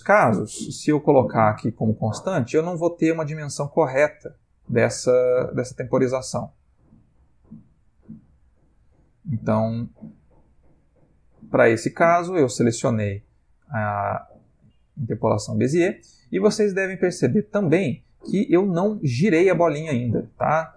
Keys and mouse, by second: 0.9 t, 2.2 space, 9.8 Escape, 12.0 t, 14.9 space.